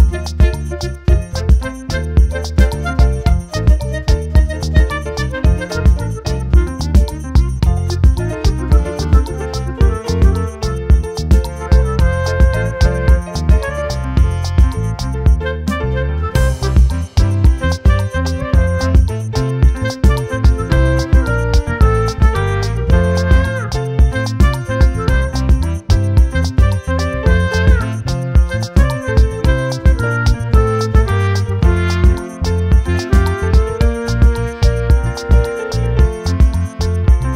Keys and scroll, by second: 32.2 ctrl+z.